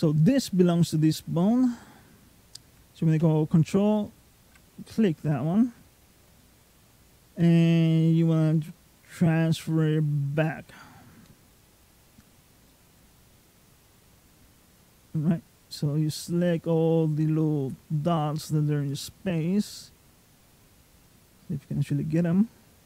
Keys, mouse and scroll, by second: 3.9 ctrl+click, 4.4 middle click, 5.7-6.2 scroll up 2, 6.2 middle click, 7.6 click, 12.5 middle click, 13.7 click, 18.9 scroll up 3, 19.4 click.